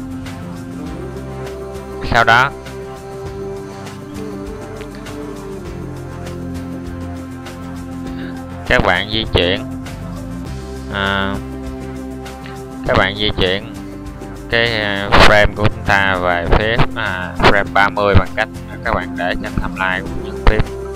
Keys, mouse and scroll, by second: 4.9 n.